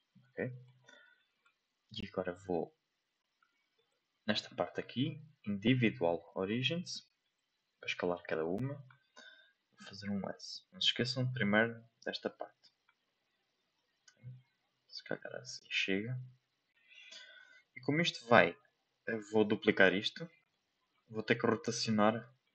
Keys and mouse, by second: 0.4 shift+middle click, 3.9-7.3 drag, 8.9 s, 13.0 s, 17.7-19.1 middle drag, 20.4 middle click, 22.4 shift+middle click.